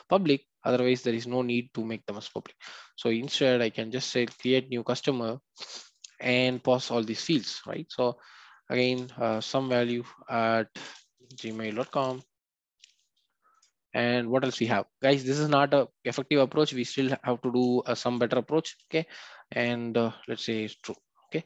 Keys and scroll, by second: 4.3 Return, 6.4 Return.